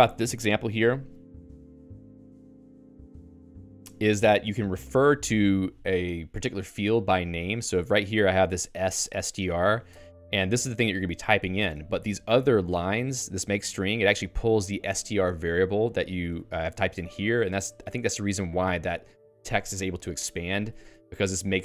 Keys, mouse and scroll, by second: 7.4 Escape, 7.5-18.3 typing, 16.9 Escape, 20.8 Escape, 21.1-21.6 typing.